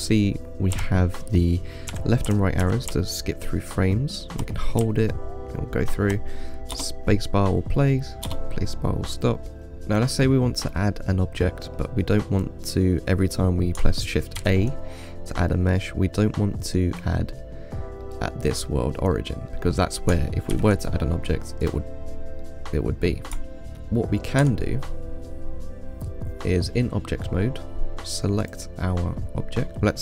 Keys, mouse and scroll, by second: 0.1 Right, 1.0 Left, 2.2 Right, 2.5 Left, 2.9 Right, 3.2-6.3 Left, 7.0 space, 8.5 space, 9.7-14.0 middle drag, 14.7 shift+a, 18.3-20.8 middle drag, 20.8 shift+a, 22.7-24.7 middle drag, 24.7 Tab, 28.7 click.